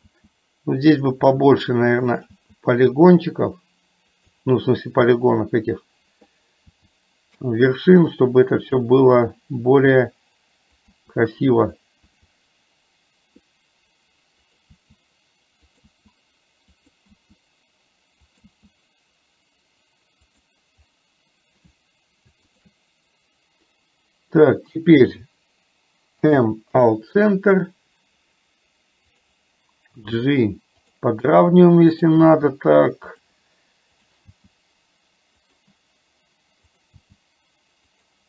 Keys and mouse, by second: 1.3 e, 4.4 e, 8.9 e, 17.2 e, 22.6 shift+click, 26.2 m, 29.2 click, 31.9 click, 32.4 g.